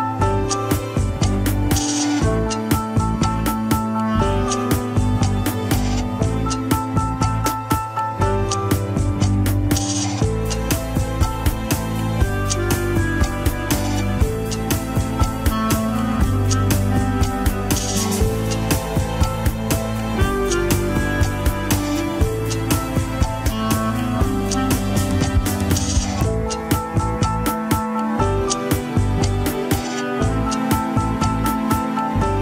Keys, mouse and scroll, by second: 0.1 ctrl+Tab, 0.3 shift+drag, 1.0 ctrl+Tab, 1.2 ctrl+Tab, 2.7 shift+click, 3.4 ctrl+Tab, 4.7 alt+z, 5.2 alt+z, 5.5 ctrl+Tab, 6.4 click, 7.4 shift+click, 8.5 ctrl+Tab, 9.2 shift+middle click, 10.1-12.6 drag, 13.6-15.0 drag, 15.0 scroll up 2, 15.7 shift+middle click, 15.9 scroll up 1, 16.6-19.1 drag, 19.4-25.0 drag, 25.8-28.9 drag, 28.9 ctrl+Tab, 29.4 click, 31.1 ctrl+Tab, 31.7 click.